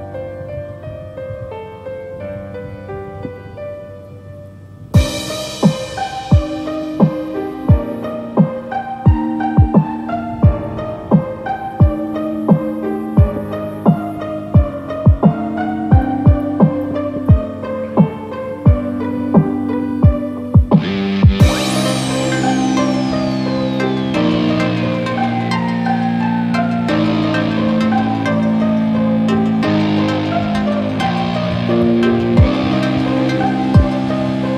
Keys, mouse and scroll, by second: 12.4 ctrl+z, 13.2 e, 16.3 click, 16.3 r, 16.3 r, 17.2 click, 17.4 click, 17.4 r, 17.5 r, 18.2 click, 18.4 r, 19.6 click, 19.9 r, 20.8 click, 20.9 click, 20.9 r, 21.6 r, 23.1 click.